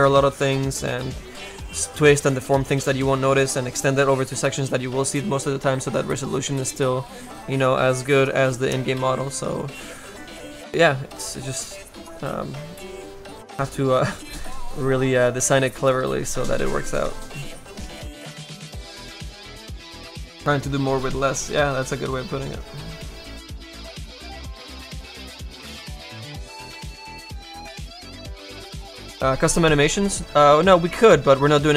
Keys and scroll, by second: 30.3 space.